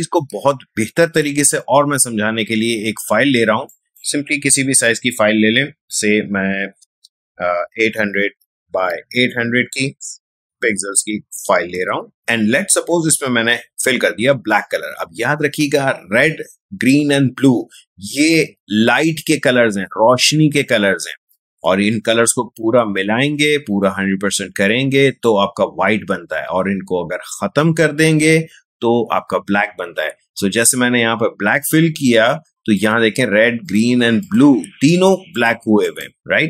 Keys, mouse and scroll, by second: 0.1 ctrl+n, 3.7 click, 7.7 typing, 8.9 Tab, 10.5-10.9 typing, 11.8 Return, 12.2 space, 13.1 alt+BackSpace, 32.7 alt+BackSpace, 32.7 click.